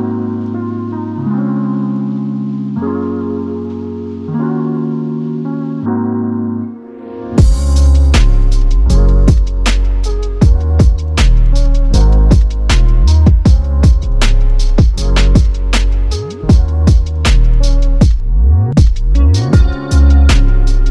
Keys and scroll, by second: 4.3 ctrl+-, 8.3 8, 8.6 Return, 11.3-12.2 typing, 15.2 typing.